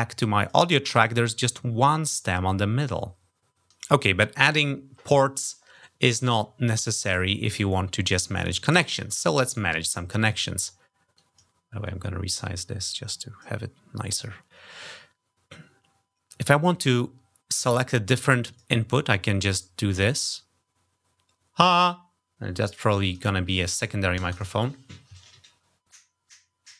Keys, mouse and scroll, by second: 0.2 click, 0.3 middle click, 10.9 click, 11.6-13.2 drag, 18.3 click, 19.7 click, 23.3 click, 24.0 shift+space.